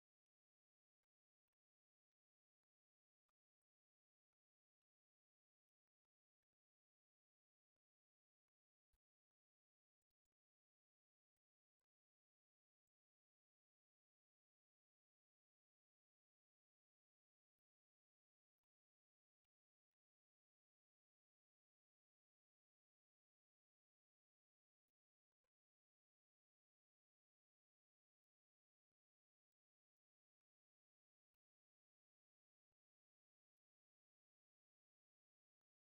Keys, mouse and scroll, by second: 1.3 click, 3.2 click, 3.6 click, 4.1 alt+middle click, 5.0 click, 6.6 click, 7.9 click, 8.9 click, 10.0-11.9 drag, 13.3 ctrl+z, 15.7 click, 17.0 click, 17.7 click, 19.4 f, 20.8 click, 21.9 click, 22.4 click, 22.9 alt+middle click, 23.8 click, 25.3 click, 26.0 click, 27.0-28.2 drag, 29.2 click, 29.5 click, 29.9 middle click, 30.2 alt+middle click, 30.8 click, 31.6 middle click, 32.6 click, 34.2 click, 35.6 f.